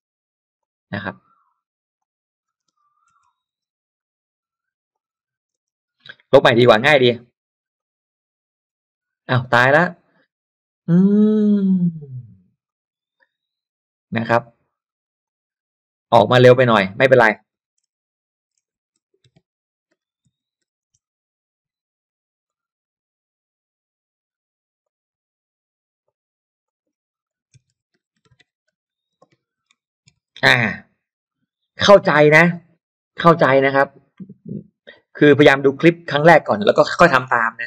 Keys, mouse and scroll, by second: 0.6-2.7 drag, 2.7 space, 3.3 space, 3.3 m, 3.6 m, 4.9 click, 5.5 space, 6.1 space, 7.7 click, 12.7 click, 15.1 click, 16.7 click, 17.6-21.3 typing, 22.5-24.5 drag, 24.8-26.7 drag, 27.1-30.9 typing, 31.3 click, 33.5 d, 34.9 u, 36.5 click.